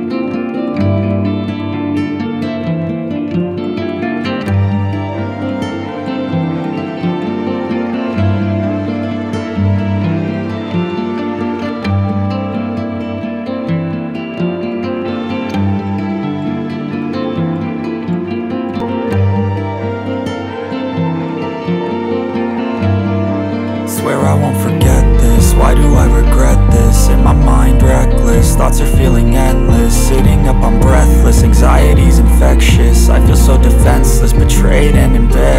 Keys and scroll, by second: 8.5 F4, 10.0 F2, 17.0 space, 17.6 ctrl+q, 24.6 3, 34.3 F4.